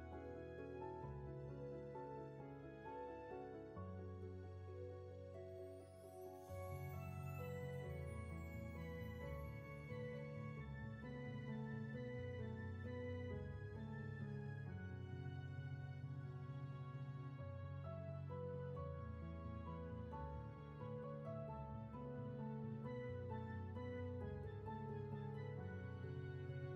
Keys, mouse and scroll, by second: 1.2 ctrl+z, 9.4 ctrl+z, 17.6 space.